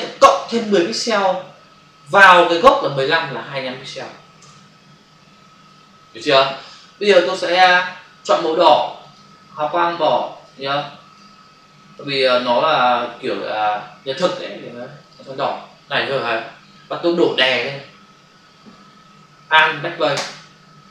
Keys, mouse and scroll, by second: 4.4 Return, 9.0 click, 10.0 click, 10.7 click, 11.7 click, 12.4 click, 15.0 click, 20.2 alt+BackSpace.